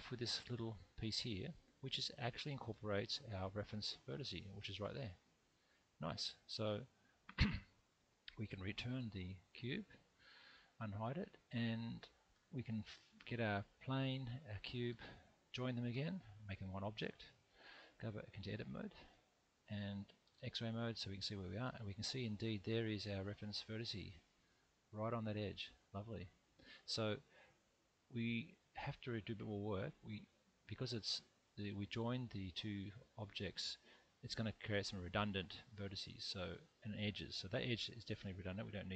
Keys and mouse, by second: 0.8 middle click, 2.2 Tab, 3.8 click, 4.3-6.1 middle drag, 6.9 Tab, 8.9 alt+h, 10.4 middle click, 12.3 alt+z, 14.5 shift+click, 15.9 ctrl+j, 18.3 Tab, 20.2 alt+z, 21.8 middle click, 24.1-26.4 middle drag, 27.0 middle click, 29.4 2, 37.8 x.